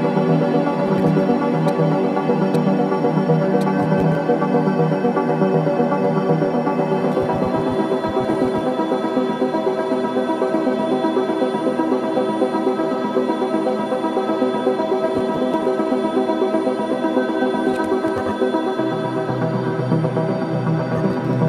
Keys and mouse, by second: 0.2-0.8 ctrl+alt+drag, 0.8 right click, 1.6-2.4 drag, 2.4 right click, 2.5-3.4 drag, 3.5-4.9 typing, 5.5-6.2 drag, 7.0-8.1 drag, 7.4-9.9 typing, 8.5 click, 10.7 click, 15.1 Right, 15.3 Right, 15.4 Right, 15.6 Right, 16.4 i, 16.5 click, 17.6-18.9 drag, 18.9 g, 19.3 z, 20.2-21.4 drag, 21.2 space.